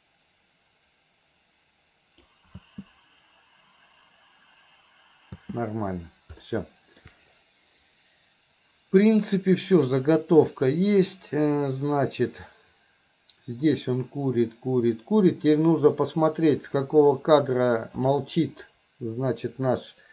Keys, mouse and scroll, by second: 2.7 space, 6.5-7.0 middle drag, 9.2-18.3 drag.